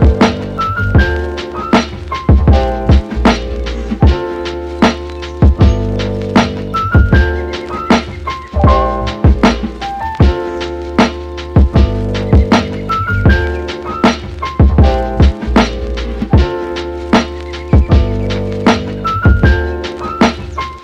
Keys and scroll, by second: 17.8 super+z.